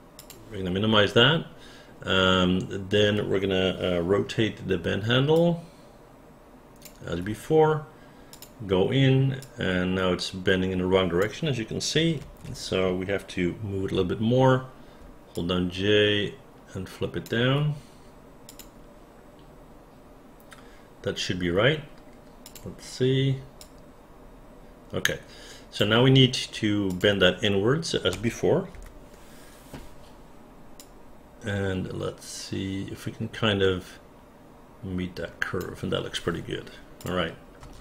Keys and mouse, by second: 5.3-6.8 drag, 5.3 j, 9.4-11.2 drag, 12.2 ctrl+z, 15.0 j, 15.3-17.2 drag, 23.6-25.8 drag, 26.9 click, 28.1 space, 28.8 f, 30.8-35.6 drag, 37.0 click, 37.6 space.